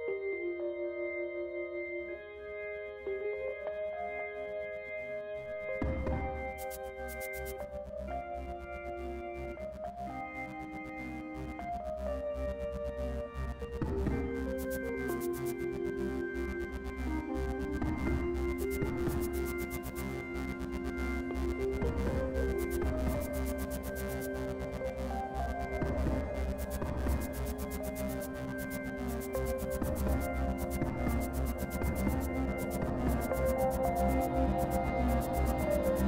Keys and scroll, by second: 2.3 alt+x.